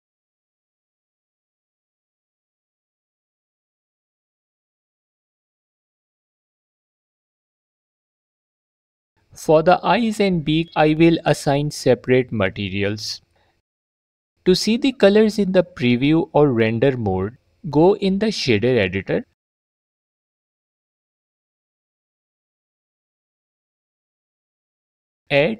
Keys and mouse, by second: 2.8 alt+click, 3.1 f, 7.4 Tab, 7.7 click, 9.9 click, 10.3 click, 11.1 click, 12.1 click, 13.5 z.